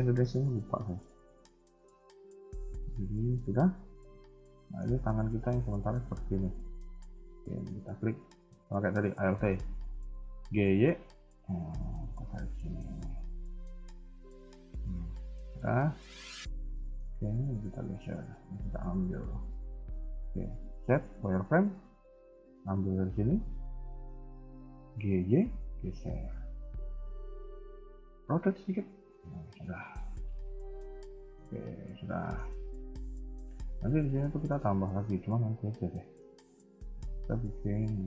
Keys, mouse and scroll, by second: 2.1 a, 3.0 Tab, 3.9 middle click, 4.8 KP_1, 5.1 KP_3, 5.8 Tab, 6.8 alt+click, 7.3 shift+middle click, 7.8-8.2 scroll up 2, 8.2 a, 8.3 a, 9.1 alt+click, 9.9 g, 14.6 KP_1, 15.1 KP_3, 16.7 shift+middle click, 17.1 z, 17.8 a, 17.9 a, 18.1 b, 19.5 z, 21.0 z, 21.3 b, 22.6-23.6 scroll up 2, 23.8 shift+middle click, 24.3 scroll down 1, 24.8 g, 26.4 r, 28.5 KP_1, 28.9 Tab, 29.2 z, 29.8 KP_3, 29.9 KP_1, 30.0-30.5 scroll down 2, 30.5 middle click, 31.4 KP_1, 32.1 shift+middle click, 32.4-33.0 scroll up 3, 32.6 Tab, 33.3 shift+middle click, 33.6 middle click, 35.0 KP_1, 35.5 scroll down 2, 36.0 shift+middle click, 36.4 Tab, 36.5 scroll down 3, 37.0 g.